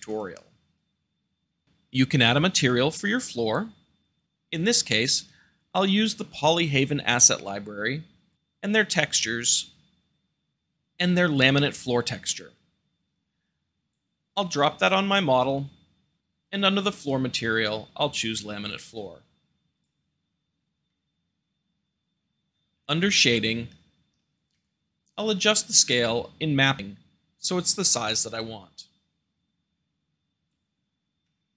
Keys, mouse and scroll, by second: 0.0 click, 0.2 x, 0.6 click, 4.2-4.8 drag, 4.9-6.0 drag, 6.6-7.6 drag, 8.1 click, 9.3-10.1 drag, 10.1-10.5 middle drag, 13.0-14.0 drag, 14.7-15.5 drag, 15.5-16.2 middle drag, 16.9-17.9 drag, 18.2-19.2 drag, 19.7-20.7 drag, 20.8-21.8 middle drag, 23.2-24.3 shift+middle drag, 24.5 shift+middle click, 25.4-27.0 shift+middle drag, 26.0-27.0 scroll up 2, 28.4-30.0 drag, 31.2 middle click.